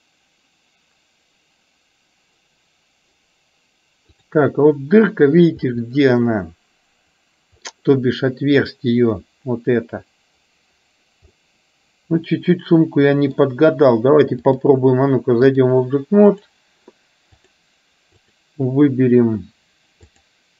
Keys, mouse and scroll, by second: 4.3-4.8 drag, 5.8-7.9 middle drag, 11.5-13.6 middle drag, 14.5-15.8 drag, 16.4 click, 17.5 click, 18.3 click, 20.1-20.5 drag.